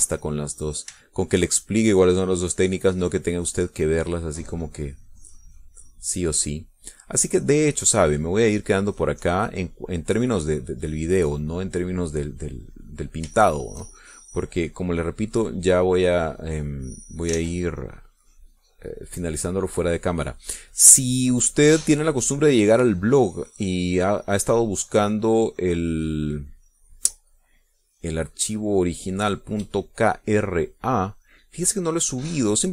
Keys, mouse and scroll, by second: 1.3 click, 2.2 shift+click, 3.1-14.5 drag, 14.6 shift+middle click, 16.1-17.7 drag, 17.9 click, 18.6 ctrl+z, 19.3-21.8 drag, 22.0-32.7 drag.